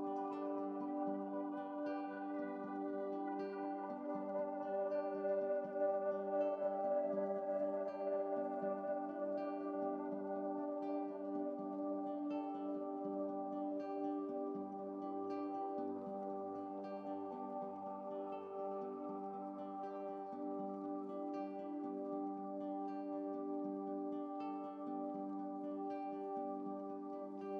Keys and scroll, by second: 3.8 ctrl+t, 5.2 Down, 5.3 Down, 5.6 Down, 6.0 ctrl+t, 6.3 Down, 7.7 Down, 7.9 Down, 7.9 Up, 8.0 Up, 17.2 shift+F7, 27.3 ctrl+z.